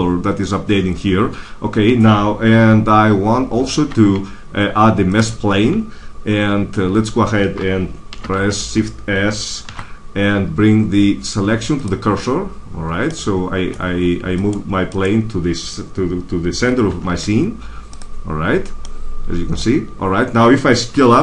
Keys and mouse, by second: 3.7 shift+a, 8.0 shift+c, 9.6 shift+s, 14.3-16.6 drag, 16.8 shift+s, 20.8 s.